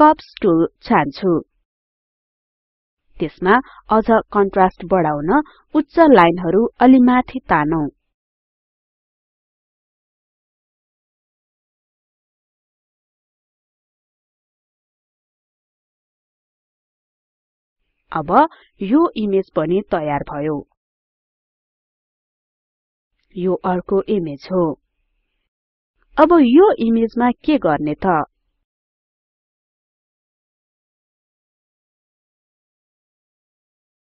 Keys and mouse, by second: 4.0 click, 5.0 click, 7.0-12.0 drag, 13.0-16.5 drag, 18.0-19.5 drag, 20.0 click.